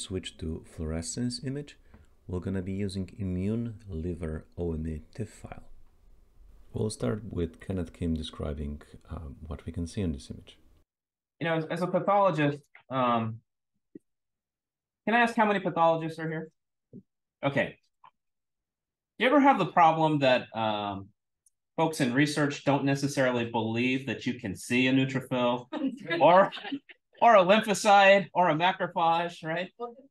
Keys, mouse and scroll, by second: 4.2-6.5 scroll down 1, 6.5-9.4 scroll down 1, 9.4-14.9 scroll down 1, 14.9 scroll down 1.